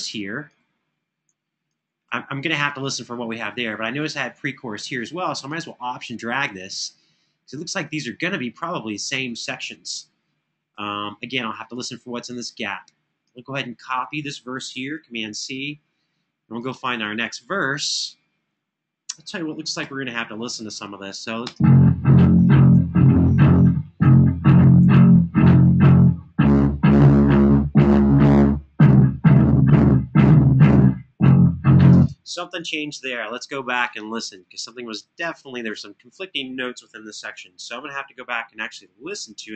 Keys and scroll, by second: 14.6 super+c, 19.6 Left, 21.2 space, 22.2 super+], 23.5 super+], 24.5 super+d, 31.7 space, 37.1 alt+f.